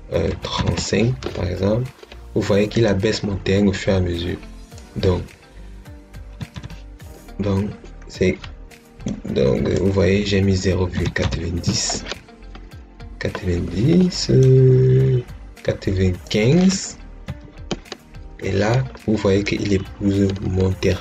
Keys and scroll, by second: 0.2 3, 0.5 5, 6.0-6.9 typing, 10.6-11.6 typing, 17.1 5.